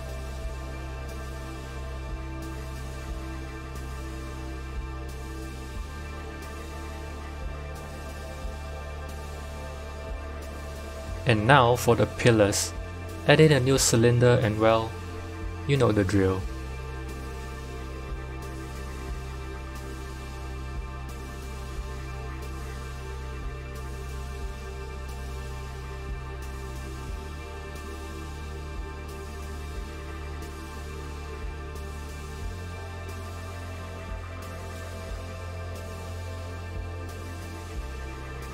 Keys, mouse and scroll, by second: 1.2-2.4 scroll down 4, 2.4 click, 2.4 scroll down 2, 2.9-3.3 scroll up 7, 3.5 g, 5.8 Tab, 8.2-9.4 scroll down 6, 9.4 click, 10.0-11.4 middle drag, 11.4 shift+a, 12.9 shift+a, 13.7 KP_7, 15.2 g, 17.4-17.8 scroll up 1, 17.8-19.1 shift+middle drag, 19.1 KP_1, 20.2 g, 23.0 Tab, 23.8 ctrl+z, 24.1 ctrl+z, 24.8 Tab, 25.7 g, 28.1 KP_7, 29.3 s, 33.7 Tab, 34.4 g, 36.8-37.2 scroll up 2, 37.2 shift+middle click, 37.6 g.